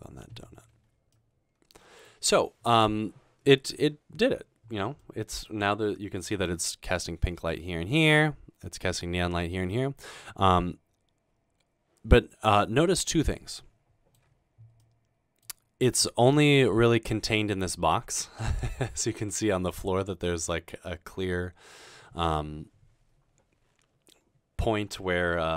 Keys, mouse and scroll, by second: 10.1-11.3 middle drag.